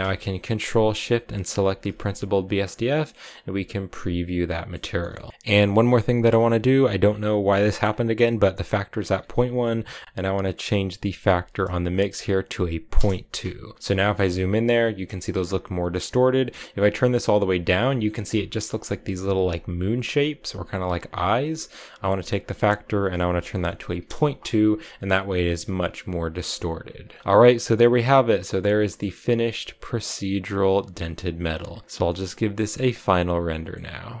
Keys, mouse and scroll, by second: 1.3 ctrl+shift+click, 2.4 click, 4.3 shift+middle click, 4.6 scroll up 5, 5.0 shift+middle click, 5.9-6.6 scroll up 4, 6.1 middle click, 6.6 middle click, 6.9-8.7 scroll up 8, 7.5 middle click, 8.7-11.9 drag, 13.7-14.2 scroll up 11, 13.8 shift+middle click, 15.9-17.7 drag, 17.7-20.7 shift+middle drag, 22.1-25.2 drag, 26.4-27.2 scroll down 10, 27.2 click, 28.0 click, 28.6-31.4 shift+middle drag, 31.4 click, 31.9-34.2 middle drag.